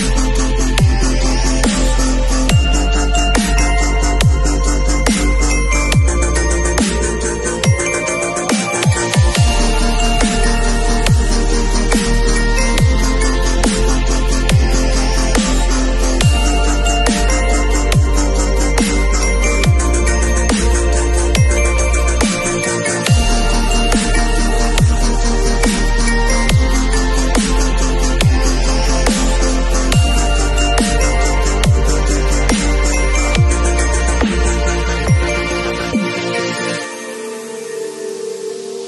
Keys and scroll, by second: 1.5 b, 10.3 0, 11.0 ], 14.3 [, 16.3 v, 26.2 b, 32.4 v, 36.8 alt+shift+Delete.